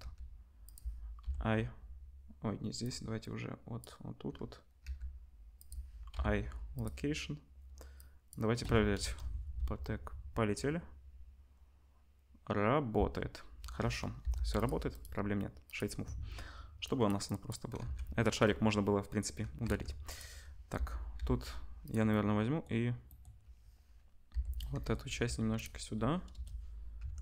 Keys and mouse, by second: 0.0 g, 1.2 i, 2.9 middle click, 2.9 right click, 4.8 g, 5.7-7.9 drag, 6.1 i, 9.0 KP_0, 9.9 space, 12.9 space, 14.2 Delete, 14.6-16.8 drag, 17.0 click, 17.8 ctrl+s, 19.6 Tab, 20.1-27.2 drag, 20.7 l, 21.1 l, 21.8 middle click, 21.8 right click, 24.3 l, 25.1 g, 26.3 KP_0, 26.9 Tab.